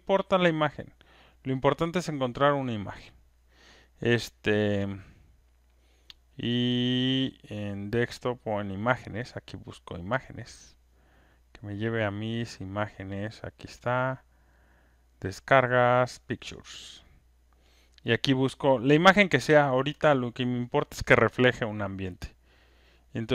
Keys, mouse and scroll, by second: 10.3-12.3 drag, 16.2 click, 17.0 click, 17.2 click, 19.6 click, 21.9 click.